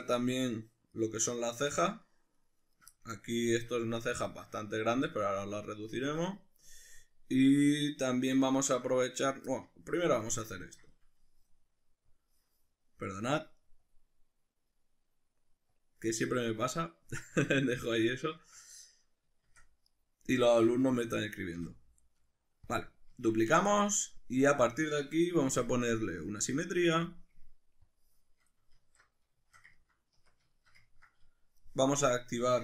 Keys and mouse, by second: 0.2 shift+right click, 0.4 shift+right click, 0.9 shift+right click, 1.2 shift+right click, 1.5 shift+right click, 1.8 shift+right click, 2.0 shift+right click, 2.4 shift+right click, 2.6 shift+right click, 3.0-20.0 middle drag, 19.4 shift+d, 20.0 right click, 21.5 p, 23.1 Tab, 23.6 right click, 24.0 right click, 25.6 click, 26.0-27.9 drag, 28.8 alt+q, 29.4-32.6 shift+middle drag, 30.2 Tab.